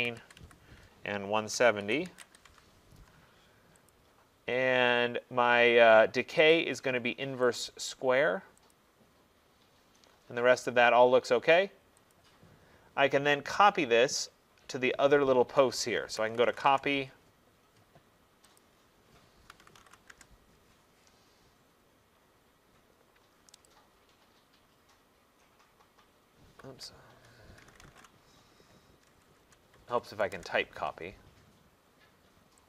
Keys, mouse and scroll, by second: 0.1 typing, 1.6 Tab, 1.6-2.4 typing, 2.5 Tab, 4.0 click, 6.6 click, 7.7 click, 8.8 click, 12.2 click, 13.6 middle click, 15.1 middle click, 15.2 middle click, 16.2-16.7 typing, 18.6 click, 19.3-20.1 typing, 21.6-22.3 typing, 21.7 middle click, 21.9 middle click, 22.5 middle click, 23.7 click, 26.7 Escape, 27.6-30.4 typing, 30.4 Return.